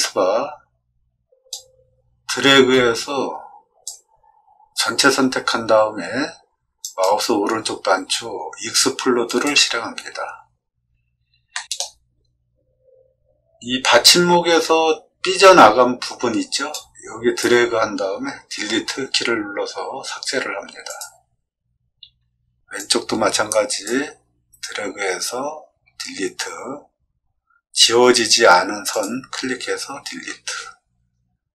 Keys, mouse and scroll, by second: 0.0 space, 1.4-3.8 drag, 6.8 right click, 9.2 click, 11.5 shift+middle click, 16.8 click, 22.7-23.8 drag, 28.9 click.